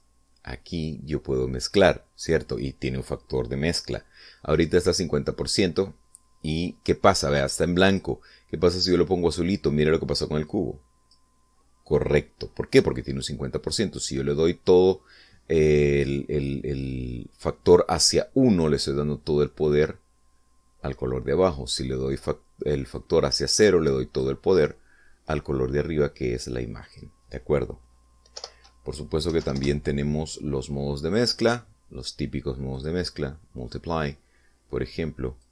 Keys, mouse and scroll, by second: 8.6 click, 11.3 click, 14.8 click, 23.8-25.2 drag, 27.6 click, 29.2 BackSpace, 30.1 ., 30.2 5, 30.4 Return, 32.0 click, 33.6 click.